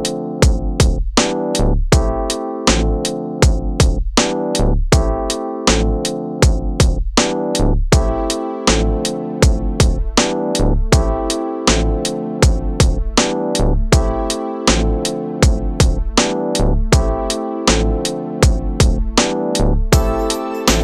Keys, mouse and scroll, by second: 0.5-2.2 drag, 2.2-4.5 drag, 4.5 s, 7.9-8.9 drag, 10.1-11.1 drag, 12.6 click, 13.4 scroll up 4, 13.7 shift+middle click, 14.1-15.7 drag, 16.2 click, 16.7 shift+middle click, 16.9 click, 17.5 shift+middle click, 17.8 click, 18.6-19.1 scroll down 3, 19.1 middle click, 19.9-20.2 scroll down 1, 20.2-20.8 middle drag.